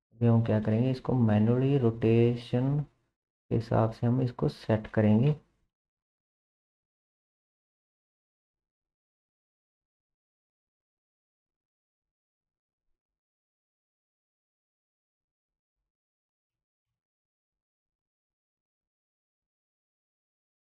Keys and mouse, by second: 5.3 KP_7, 7.6 r, 13.9 r, 16.9 middle click, 16.9 KP_3, 17.9 shift+middle drag, 18.5-19.2 shift+middle drag, 19.6 KP_1, 20.4-20.6 shift+middle drag.